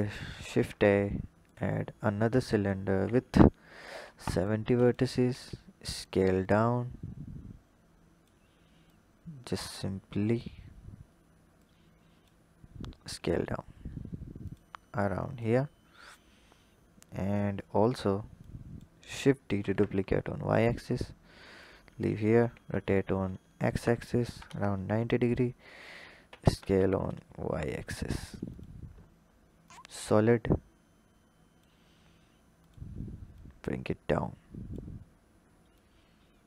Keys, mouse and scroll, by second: 0.3 shift+a, 2.5-4.3 drag, 4.8 click, 5.2 s, 6.5 click, 8.8 click, 10.5-11.5 scroll up 4, 11.5-12.4 drag, 12.4-12.9 scroll up 3, 12.9 s, 14.9 click, 15.6-18.3 scroll down 3, 18.3-19.5 drag, 19.5 shift+d, 22.3 r, 26.2 s, 29.5 drag, 30.4 click, 32.5 click, 34.9-35.6 scroll down 3, 35.6 click.